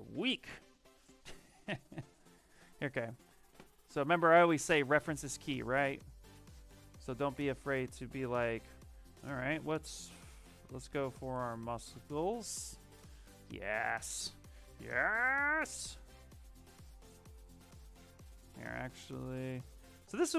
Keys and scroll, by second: 1.8 s, 5.5 e, 6.7 BackSpace, 7.2 BackSpace, 7.5 BackSpace, 9.1-12.3 typing, 12.8 Return.